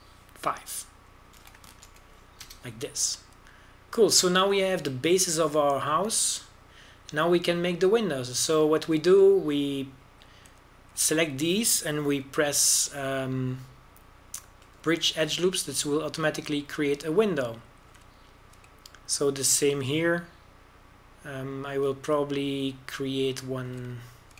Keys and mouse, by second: 5.1 a, 6.5-8.4 drag, 8.4 middle click, 8.5 click, 10.0 middle click, 14.0 w, 17.2 a, 17.7 middle click, 18.1 middle click, 18.7 middle click, 18.8-22.4 middle drag, 23.8 middle click.